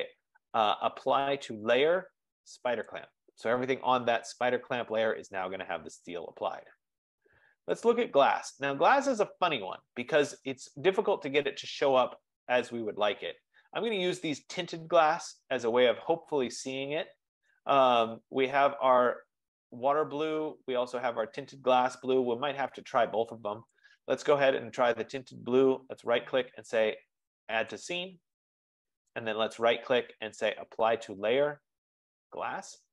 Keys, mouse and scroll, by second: 3.0 click, 8.0 click, 11.7-12.9 scroll, 14.6-15.3 scroll, 18.1 scroll, 20.2 scroll, 23.9 middle click, 23.9 click, 25.5 right click, 27.8 click, 29.3 right click.